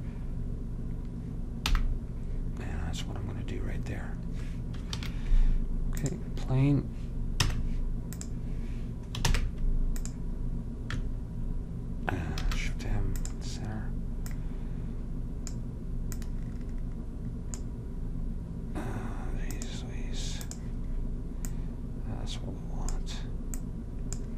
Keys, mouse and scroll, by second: 1.8 n, 5.1 shift+a, 7.6 Tab, 9.4 ctrl+Tab, 12.5 alt+m, 17.4 click, 19.7 click.